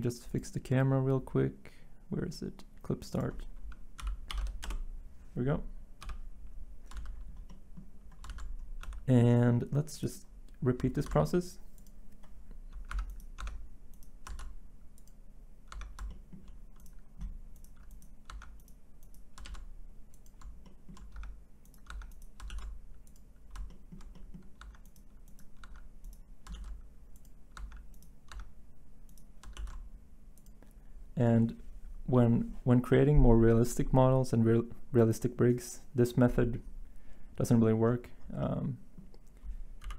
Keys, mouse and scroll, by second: 4.0 click, 4.3 typing, 4.6 Return, 5.8-7.0 typing, 8.3 z, 8.8 Tab, 11.0 s, 12.9 Tab, 13.4 Tab, 14.3 s, 15.7 Tab, 18.3 Tab, 19.4 s, 21.1 Tab, 21.9 Tab, 22.5 s, 24.6 Tab, 25.6 Tab, 26.5 s, 27.6 Tab, 28.3 Tab, 29.6 s, 39.8 7.